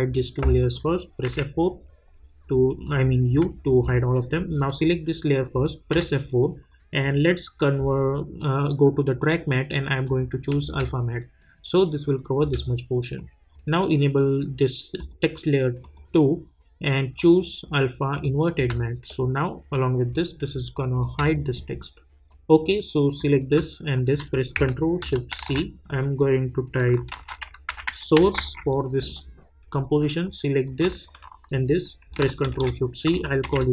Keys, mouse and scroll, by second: 1.2 u, 4.6 click, 5.9 F4, 7.0 click, 10.0 click, 10.6 space, 13.1-14.9 drag, 18.5 space, 22.3 click, 25.3 c, 26.9-28.8 typing, 29.0 Return, 30.2 click, 31.0 shift+click, 32.4 ctrl+shift+c, 33.2-33.7 typing.